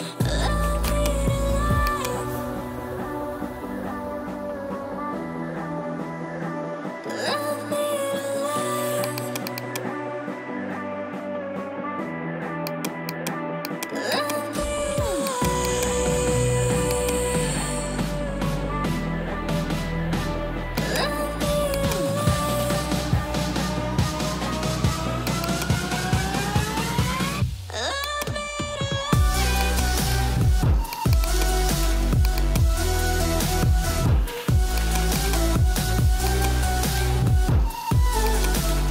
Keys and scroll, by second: 10.3 1, 10.6 0, 10.9 Return, 26.0-27.0 typing, 33.2 ctrl+0.